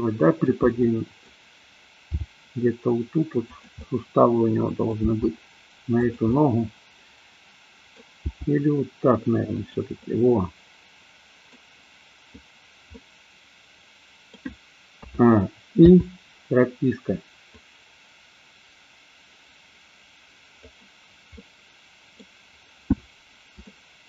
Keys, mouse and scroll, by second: 0.8 scroll up 1, 0.9-1.4 middle drag, 2.1 g, 3.5 click, 3.8 scroll up 1, 3.9-5.0 middle drag, 5.0 g, 6.0 click, 6.3 scroll up 1, 6.3-8.0 middle drag, 8.3 g, 9.6 click, 10.0-11.5 middle drag, 12.9-14.3 middle drag, 15.0 a, 15.8 i, 17.5-20.6 drag, 21.4-22.1 middle drag, 23.6-24.0 shift+middle drag.